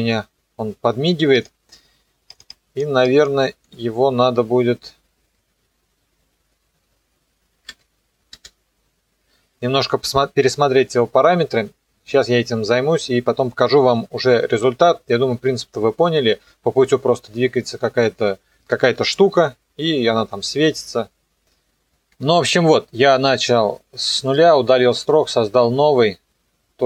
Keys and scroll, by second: 4.9 KP_0, 8.3 space.